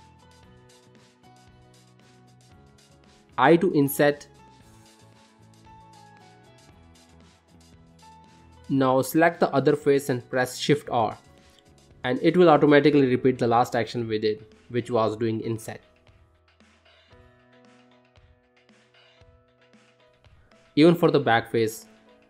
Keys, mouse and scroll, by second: 0.1 middle click, 0.7 ctrl+middle click, 1.0 shift+middle click, 1.5 ctrl+middle click, 1.8 shift+middle click, 2.2 middle click, 3.2 i, 6.9 shift+middle click, 7.4 middle click, 8.5 click, 11.3 shift+r, 11.8 click, 12.5 click, 13.8 shift+r, 15.1 click, 16.2 click, 16.5 middle click, 17.1 scroll down 2, 17.5 middle click, 18.0 shift+middle click, 18.3 middle click, 18.9 shift+middle click, 19.4 middle click, 19.7 middle click, 20.4 shift+middle click, 20.7 middle click, 21.2 click.